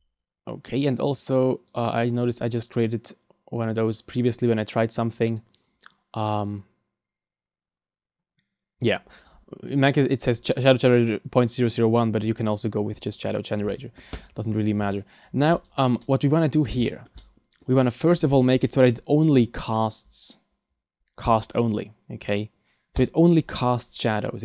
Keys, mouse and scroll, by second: 1.1 click, 2.5 click, 14.9 middle click, 15.6 right click, 16.0 middle click, 16.8 shift+middle click, 17.2 middle click, 18.1-19.2 scroll down 11, 21.3 click, 23.0 click.